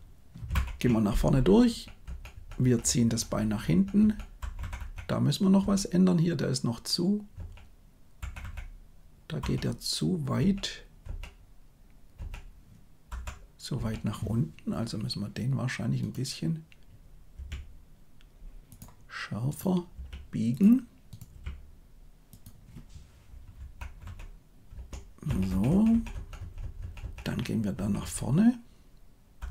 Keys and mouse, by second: 0.4 shift+Left, 1.6 Right, 2.0 Right, 2.3 Right, 2.5 Right, 2.8 Right, 3.0 Right, 3.2 Right, 3.4 Right, 3.6 Right, 3.9 Right, 4.4 Left, 4.5 Left, 4.7 Left, 5.5 Right, 7.3 Right, 8.1 Left, 8.3 Left, 9.3 Left, 10.3 Right, 11.0 Right, 12.1 Right, 13.1 Left, 13.7 Right, 19.8 r, 21.2 g, 23.5 Left, 23.9 Left, 24.6 Right, 25.2 Right, 25.4 Right, 25.6 Right, 25.8 Right, 26.0 Right, 26.3 Right, 26.5 Right, 26.7 Right, 26.9 Right, 27.1 Right, 27.7 Right, 27.9 Right, 29.4 Left.